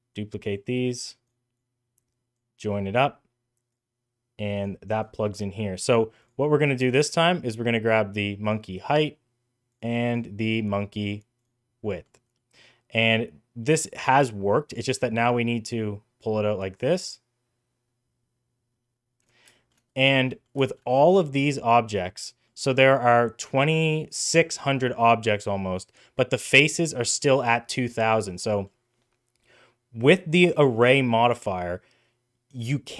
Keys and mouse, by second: 0.8 click, 1.4 click, 3.7-4.5 drag, 6.1 click, 6.7 click, 9.6 click, 11.8 middle click, 12.3 middle click, 13.5 middle click, 15.1-19.1 drag, 19.4 shift+middle drag, 19.8 middle click, 20.2 middle click, 20.5 shift+middle click, 20.7 middle click, 21.5 middle click, 27.2-28.1 middle drag, 28.4 middle click.